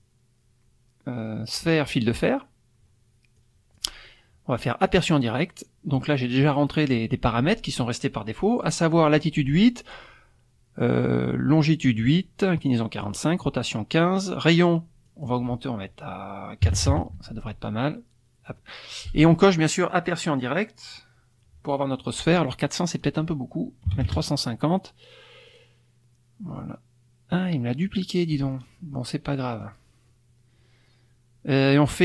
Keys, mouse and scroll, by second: 2.1 click, 3.3 click, 4.9 click, 15.1 click, 16.6 KP_4, 16.7 KP_0, 17.2 Tab, 19.3 click, 19.9 click, 23.0 click, 23.9 KP_3, 24.0 KP_5, 24.0 KP_0, 25.5 click, 27.8-28.5 drag.